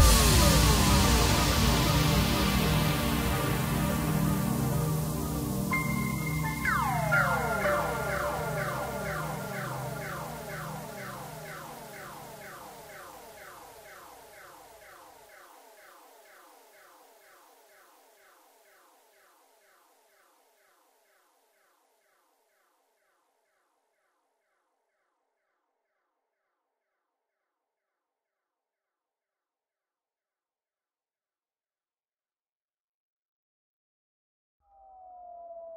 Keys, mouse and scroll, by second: 3.5 KP_7, 4.2 s, 9.3 g, 11.0 KP_1, 11.8-12.5 scroll up 1, 12.5-12.9 scroll up 1, 12.9-13.2 scroll down 1, 13.2-16.2 middle drag, 16.2-16.9 scroll up 1, 16.9 KP_1, 17.5-18.2 scroll up 2, 18.2 s, 23.7 shift+d, 28.0 shift+click, 29.4 ctrl+j, 30.1-30.4 scroll down 1, 30.4-30.9 middle drag, 30.9 click, 32.8 drag, 33.9 click.